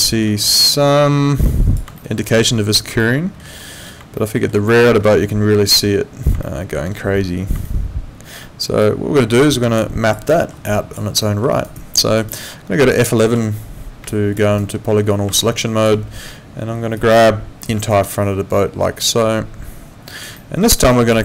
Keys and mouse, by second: 0.0 alt+middle click, 1.4 click, 2.0 alt+middle click, 3.0 alt+middle click, 4.2 alt+middle click, 6.4 alt+middle click, 7.6 alt+middle click, 8.8 click, 9.8 alt+click, 10.3 alt+middle click, 10.7 alt+click, 11.2 alt+middle click, 11.5 alt+right click, 11.7 alt+click, 12.2 alt+right click, 13.3 F11, 14.1 alt+click, 14.4 alt+right click, 15.4 alt+click, 17.0 click, 17.9 alt+click, 20.4 alt+middle click, 20.7 alt+right click, 20.9 alt+click.